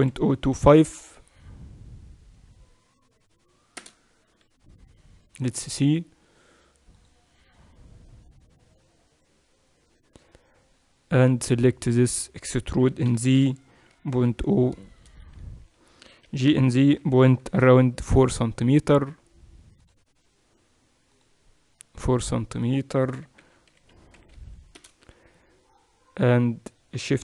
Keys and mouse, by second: 11.1 click, 11.8-13.1 middle drag, 12.8 e, 13.1-16.2 right drag, 16.3 g, 23.1 g.